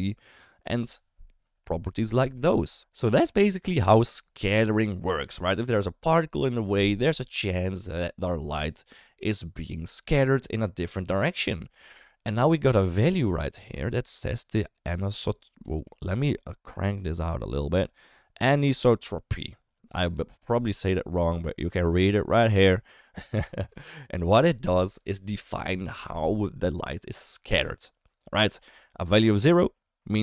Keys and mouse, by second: 2.8 ctrl+z, 13.4 click, 15.7 shift+middle click, 17.0 click, 20.9 shift+middle click, 24.0 shift+middle click.